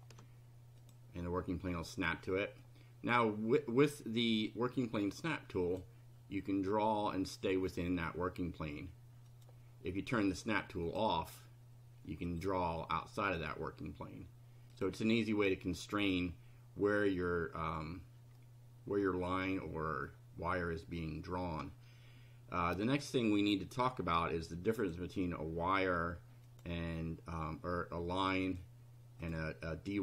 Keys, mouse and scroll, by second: 0.8 click, 2.2 middle click, 5.7 click, 7.7 click, 9.3 click, 10.9 click, 12.3 click, 13.3 click, 14.7 click, 18.3-20.2 middle drag, 24.7 click, 26.5 click, 28.5 click, 29.2 click.